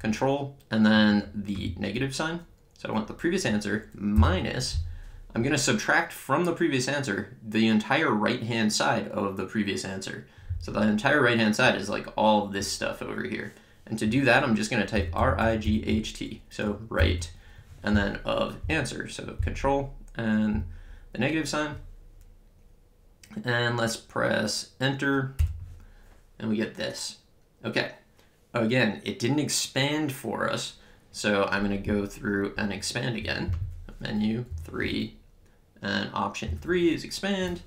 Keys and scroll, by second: 4.2 -, 14.7-17.0 typing, 25.4 Return, 33.6 Menu, 34.5 3.